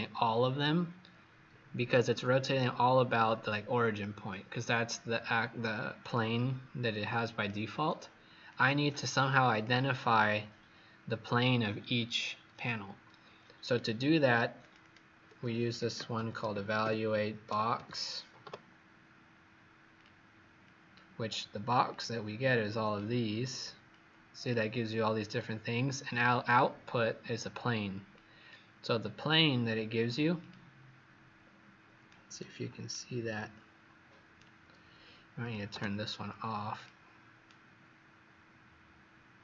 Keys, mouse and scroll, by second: 14.7 click, 15.0-17.7 typing, 19.8 click, 31.3 scroll up 2, 32.0 right click, 32.0-32.8 scroll up 1, 35.3 click, 37.4 right click.